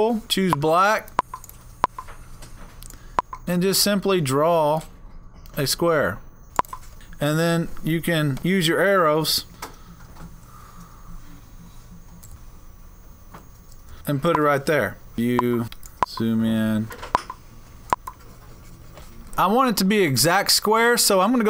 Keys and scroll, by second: 8.4 Up, 8.8 Up, 8.8 Up, 8.9 Up, 9.5 Up, 12.3-12.8 Left, 13.9 Down.